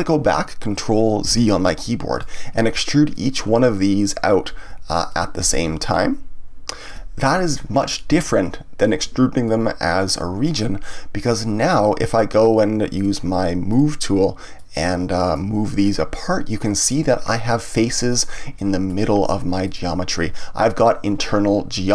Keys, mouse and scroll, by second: 1.2 ctrl+z, 2.1 click, 3.1-5.1 drag, 5.8-8.3 ctrl+drag, 9.4-10.9 ctrl+drag, 10.9-12.9 middle drag, 12.9 click, 13.7 click, 14.5-15.9 drag, 16.6 click, 17.2 middle click, 18.1 click, 18.5-19.6 middle drag, 19.6 click, 21.2-21.9 middle drag.